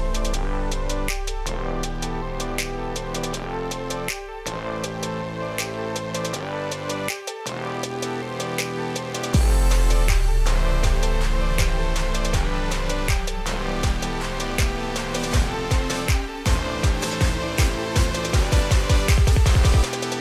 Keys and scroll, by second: 4.7 ctrl+g, 8.6 ctrl+space.